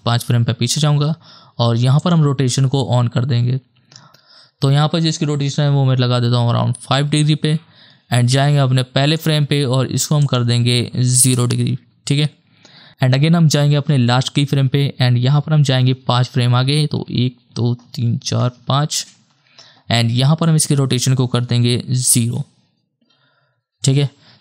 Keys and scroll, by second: 6.0 KP_5, 6.4 Return, 11.2 KP_0, 11.3 Return, 13.3 k, 13.6 k, 17.0 ctrl+Right, 17.8 ctrl+Right, 18.6 ctrl+Right, 21.6 KP_0, 22.1 Return.